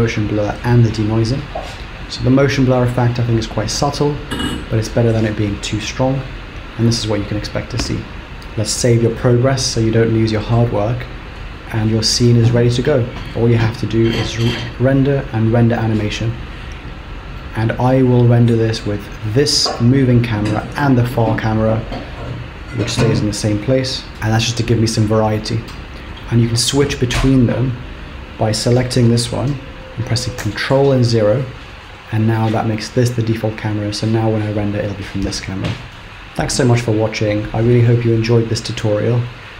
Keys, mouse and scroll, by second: 9.2 ctrl+s, 11.7 middle click, 14.3 click, 16.8-17.3 scroll down 2, 17.5 middle click, 18.2-19.3 scroll down 5, 19.3 click, 20.8 click, 23.6 ctrl+KP_0, 24.1 scroll down 2, 24.7 shift+middle click, 30.5 ctrl+KP_0, 31.5-32.4 scroll up 3, 32.4-33.4 scroll down 1.